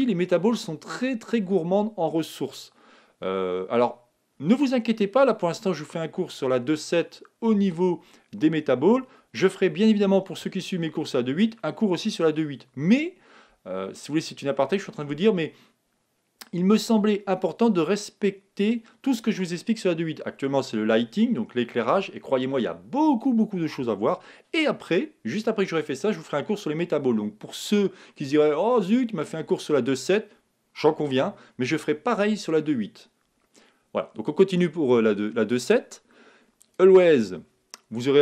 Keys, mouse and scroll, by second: 36.6-38.2 drag.